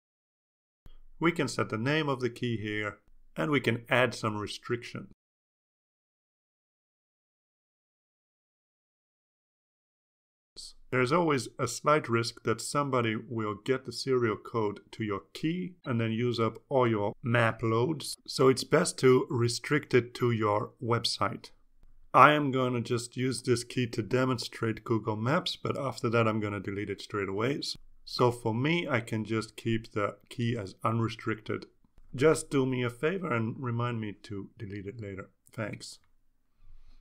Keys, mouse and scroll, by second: 0.5 click, 6.0 click.